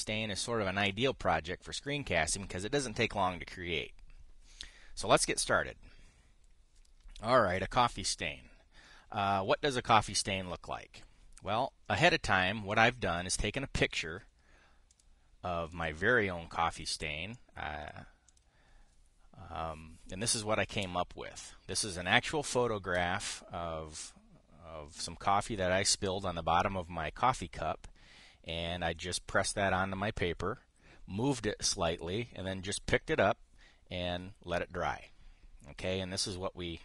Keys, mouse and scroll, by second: 13.4 click, 15.6 click, 16.4 click, 17.4 click, 18.0 click, 19.0 click.